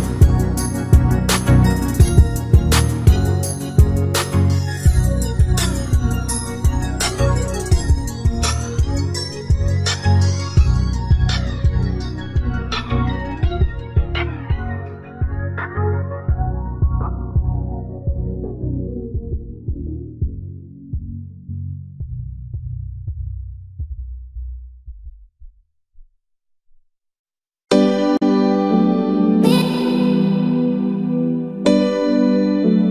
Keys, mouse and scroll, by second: 0.0-1.4 typing, 0.8 click, 2.5 click, 2.6-2.9 scroll down 4, 2.8 shift+middle click, 2.9 scroll up 2, 3.0 click, 3.4 e, 4.6-5.0 scroll up 2, 5.4-8.2 typing, 5.8 shift+middle click, 6.7 shift+middle click, 7.0 shift+middle click, 10.7 e, 10.8 s, 11.4 e, 11.5 s, 11.8 shift+middle click, 11.8 scroll down 6, 11.9-12.6 scroll up 5, 12.9 shift+middle click, 13.6 click, 13.9 g, 14.0 middle click, 14.7 g, 17.2 middle click, 17.4 click, 17.5 2, 17.6 click, 17.7 shift+click, 17.9 middle click, 18.2 x, 18.6 click, 18.7 middle click, 18.8 click, 19.0 scroll up 1, 19.1 shift+click, 19.3 shift+click, 19.3 x, 19.6 click, 19.9 scroll up 1, 20.2 middle click, 20.2 1, 20.3 click, 20.6 shift+click, 20.6 right click, 21.2 right click, 21.2 click, 21.7 click, 21.9 middle click, 22.0 shift+click, 22.2 right click, 22.5 middle click, 22.5 shift+click, 23.0 right click, 24.1 e, 24.2 middle click, 25.0 middle click, 25.2 scroll up 1, 25.3 click, 25.7 e, 25.8 click, 26.1 click, 26.3 click, 26.3 shift+click, 26.5 shift+click, 26.5 f, 26.6 click, 26.7 shift+click, 27.3 shift+click, 27.4 click, 27.5 f, 27.6 ctrl+z, 27.8 shift+click, 27.9 f, 28.0 click, 28.1 middle click, 30.5 KP_3, 32.7 click.